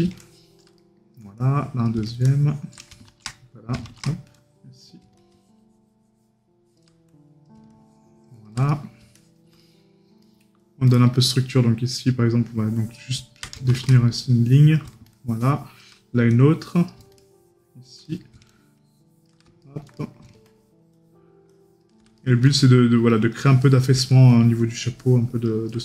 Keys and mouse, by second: 8.7 right click, 18.1 right click, 19.7 right click, 22.2 right click.